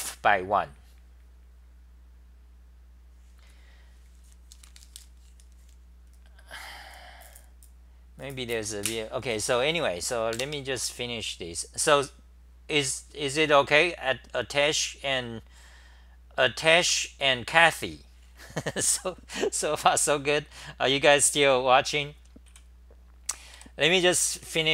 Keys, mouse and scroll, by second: 14.6 Delete, 14.6 typing, 22.5 w, 24.1-24.7 typing.